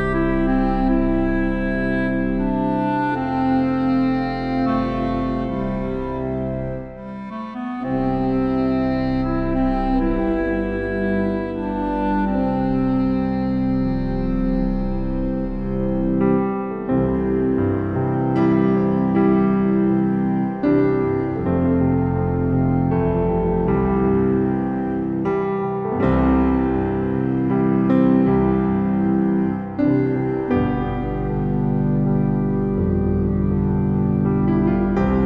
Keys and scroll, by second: 16.8 ctrl+b.